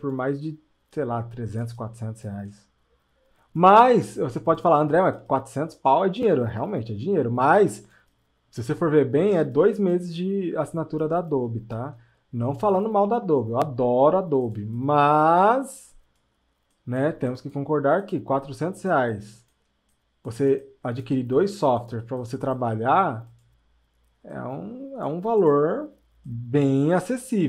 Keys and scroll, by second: 11.1 space, 14.6 space, 19.0 space.